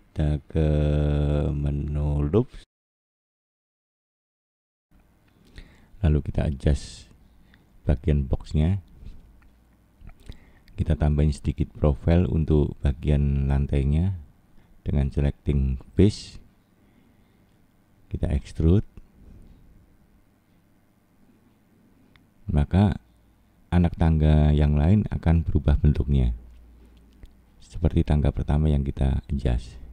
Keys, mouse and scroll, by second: 0.0 shift+middle click, 2.1 click, 4.6 click, 7.6 scroll up 2, 9.2 click, 10.3 click, 13.9 click, 15.8 e, 19.0 middle click, 19.9 scroll down 2, 20.7 middle click, 24.7 click, 25.7 click.